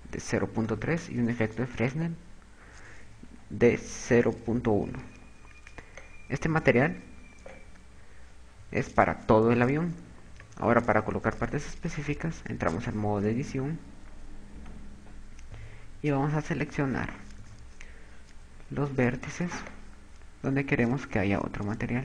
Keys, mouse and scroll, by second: 2.3 click, 5.1 click, 8.7 KP_8, 9.7 KP_6, 10.7 KP_4, 12.6 Tab, 14.7 z, 15.6 KP_8, 16.4 KP_6, 19.6 b.